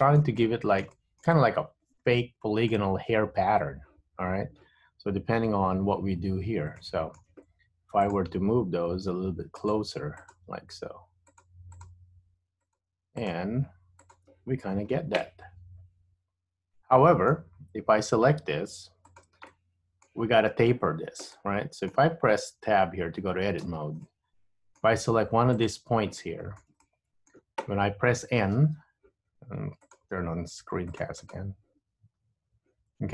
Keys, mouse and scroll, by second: 31.9 n, 32.4 n.